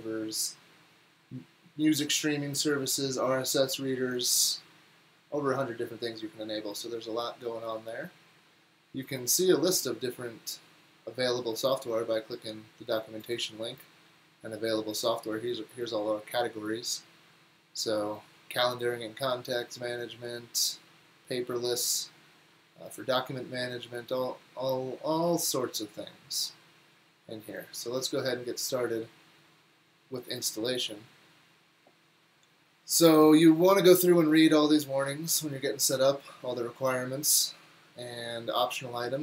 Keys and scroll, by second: 7.4 typing, 9.8 typing.